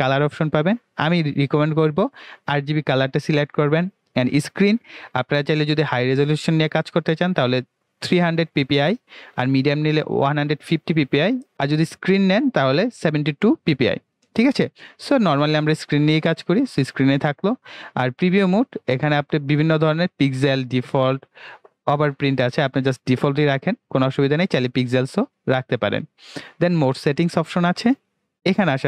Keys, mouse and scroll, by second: 1.8 click, 4.2 click, 15.8 click, 18.5 click, 25.4 click.